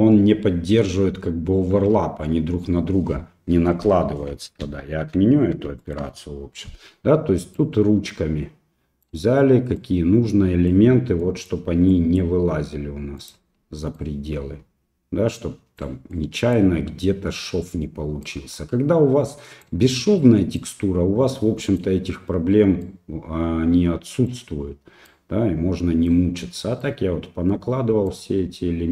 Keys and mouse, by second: 4.7 ctrl+z, 7.5-9.0 right drag, 9.8 middle click, 11.3 middle click, 11.9 click, 13.2 right click, 13.9-15.9 right drag, 16.1 middle click, 18.2-19.6 right drag, 20.6-21.8 right drag, 22.8-24.3 right drag, 25.1-26.1 right drag, 26.8-28.1 right drag.